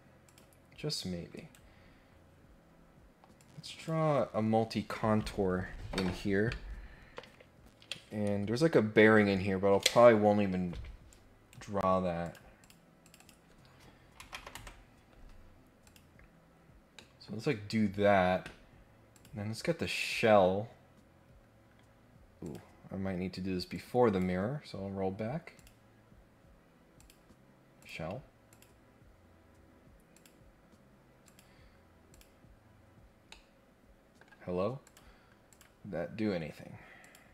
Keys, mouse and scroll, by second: 0.2 click, 1.3 right click, 1.9 scroll down 1, 2.2-2.8 scroll up 2, 3.4 click, 11.1 right click, 12.2 click, 12.5 click, 12.9 click, 13.2 click, 15.8 click, 16.9 middle click, 17.5 scroll up 1, 17.7 scroll down 2, 19.1 click, 22.4 click, 23.7 click, 25.5 click, 26.9 click, 27.8 click, 28.5 click, 30.1 click, 31.2 click, 32.1 click, 33.3 middle click, 34.8 click, 35.5 click, 37.0 click.